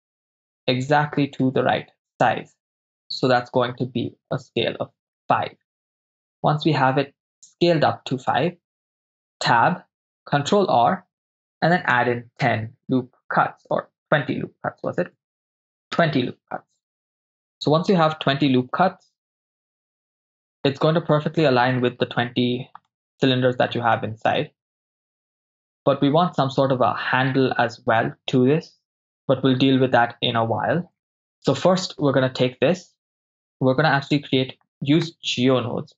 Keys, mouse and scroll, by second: 6.0 ctrl+click, 7.0-8.1 middle drag, 9.5 Tab, 10.6 ctrl+r, 17.2 Return, 19.6-20.8 middle drag, 22.9 middle click, 24.0 shift+middle click, 31.1 Tab, 35.1-35.9 drag.